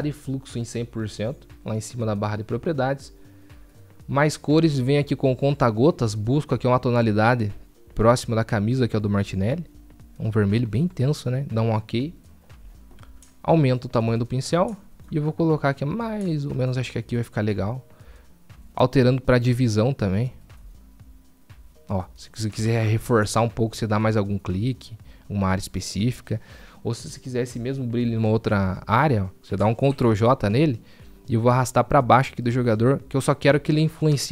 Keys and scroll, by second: 30.0 ctrl+j, 33.8 ctrl+j.